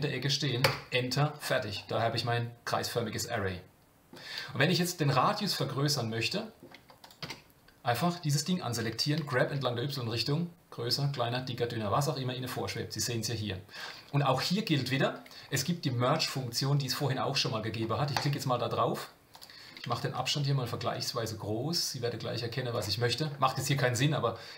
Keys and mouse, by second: 1.9-4.1 middle drag, 6.3 middle drag, 7.2 Tab, 9.1 g, 18.1 click, 19.3 click, 20.2-22.7 shift+drag, 23.5 shift+middle click.